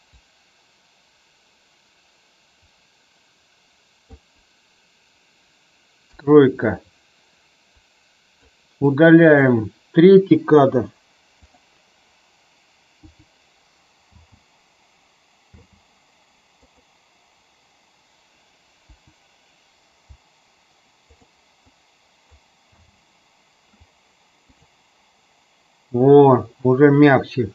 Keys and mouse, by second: 0.2 click, 6.0 KP_3, 7.8 click, 9.2 click, 11.4 click, 12.9 Delete, 14.0 space, 16.6 click, 18.9 Delete, 21.2 click, 21.6 click, 22.6 space, 24.5 click.